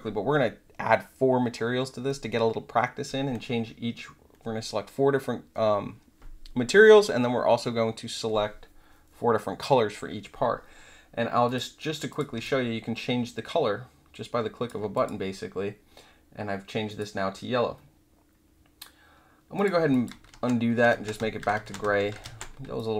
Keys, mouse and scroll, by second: 11.4 click, 12.0 click, 12.4-14.6 alt+drag, 14.9 click, 16.8 click, 19.5 click, 19.9 alt+click, 20.3 ctrl+z, 20.9 ctrl+z, 21.5 ctrl+z, 22.2 ctrl+z, 22.7 alt+click.